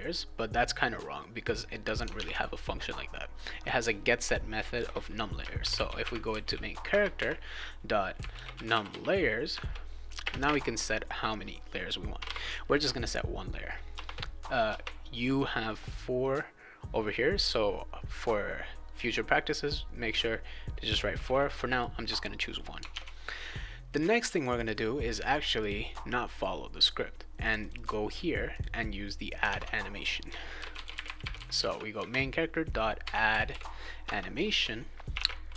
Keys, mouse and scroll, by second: 2.1 alt+Tab, 5.3-10.4 typing, 9.5 Return, 11.9-12.7 typing, 13.9 Return, 14.7 Return, 19.6 click, 21.6 click, 22.1 click, 22.9 alt+Tab, 24.1 click, 24.3 click, 24.5 click, 25.0 click, 25.2 click, 25.6 click, 27.4 click, 27.6 click, 27.7 click, 28.5 click, 29.4 alt+Tab, 30.3-35.5 typing, 34.0 Return.